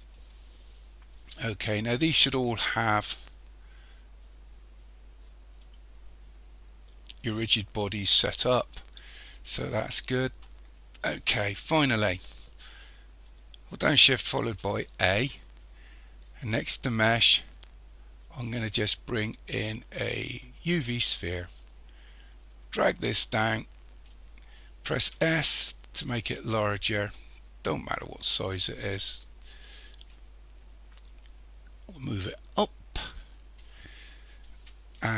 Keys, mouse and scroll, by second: 0.6-2.3 scroll down 2, 2.3 click, 5.6 click, 8.9-9.5 scroll up 2, 9.5-11.2 scroll down 1, 11.2 KP_1, 11.7-14.4 scroll down 1, 14.4 shift+a, 22.5 click, 25.2 s, 32.0 click, 34.0-34.9 scroll up 3.